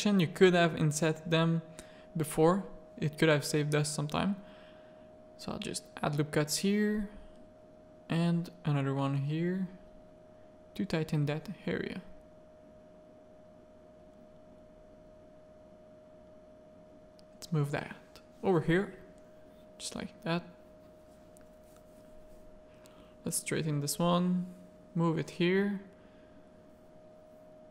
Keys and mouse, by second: 0.8 Tab, 1.0-1.4 middle drag, 1.9 z, 3.0 Tab, 3.5 middle click, 3.9 ctrl+r, 6.4 z, 8.0 g, 9.5 ctrl+r, 12.1 a, 12.4 middle click, 13.8 1, 15.0 alt+click, 15.6 g, 17.3 Tab, 17.9-18.4 middle drag, 18.5 Tab, 18.8 a, 20.7 alt+click, 21.6 g, 23.8 g, 25.5 ctrl+r, 27.1 a, 27.6 middle click.